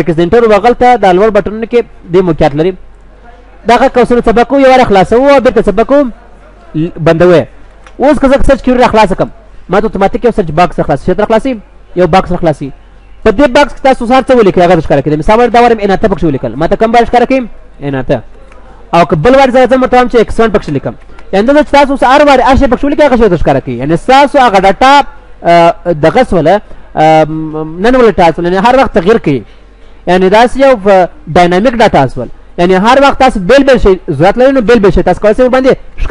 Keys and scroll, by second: 6.7 ctrl+s, 7.7 ctrl+w, 17.9 ctrl+w, 18.5 ctrl+w, 35.5 ctrl+w, 36.0 ctrl+w.